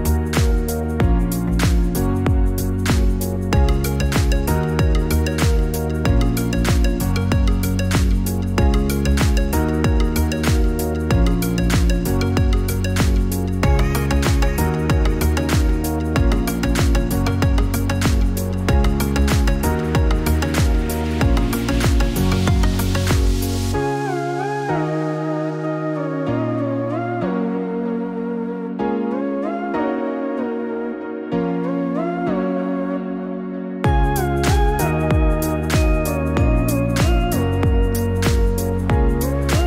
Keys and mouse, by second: 1.3 shift+d, 7.3-10.5 drag, 14.0 p, 22.5-24.0 drag, 31.7-32.7 drag, 33.8 click, 36.0 click, 36.3-39.6 drag, 38.0 BackSpace.